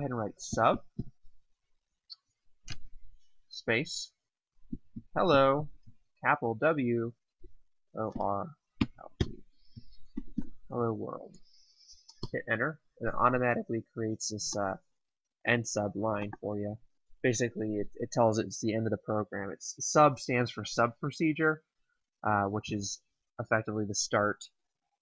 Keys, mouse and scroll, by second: 0.1-1.3 typing, 2.5 space, 4.3-6.0 typing, 7.1-9.1 typing, 10.2 typing, 12.1 Return, 14.5 click.